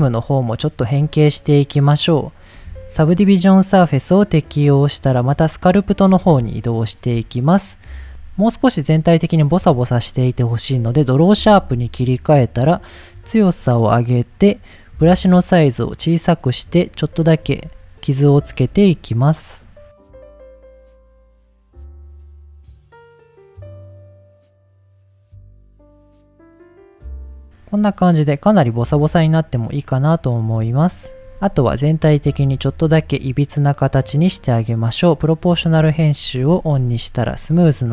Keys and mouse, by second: 0.5 click, 3.3-3.9 drag, 6.5 shift+middle click, 8.9 middle click, 10.6 click, 12.4-13.6 drag, 16.5 click, 17.5 f, 18.2 click, 19.4 click, 20.2 click, 20.5 middle click, 20.6 click, 21.2 click, 21.8 click, 22.5 click, 23.0 click, 23.6 click, 24.1 click, 24.4 click, 24.6 click, 24.8 middle click, 25.0 click, 25.3 click, 25.5 ctrl+z, 25.6 ctrl+z, 25.7 ctrl+z, 25.8 click, 26.0 middle click, 26.2 click, 26.4 click, 26.8 click, 27.2 middle click, 27.6 middle click, 28.1 middle click, 28.5 middle click, 29.0 middle click, 30.4 click, 32.1 Tab, 33.1 click, 34.1 click, 34.5-35.7 drag, 36.4 g, 37.4 click, 37.8 click.